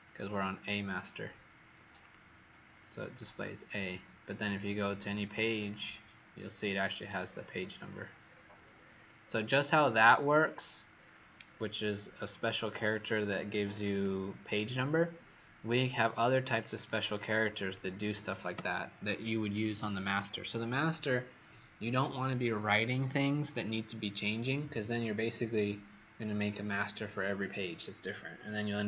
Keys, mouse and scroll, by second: 0.3 Escape, 1.9 click, 5.5 click, 7.1-9.2 scroll down 31, 9.3-9.7 scroll down 6, 9.8-10.9 scroll down 7, 10.9-13.7 scroll down 24, 13.7 click, 13.8 click, 16.4 click, 16.7 click, 17.5 click, 18.5 Delete.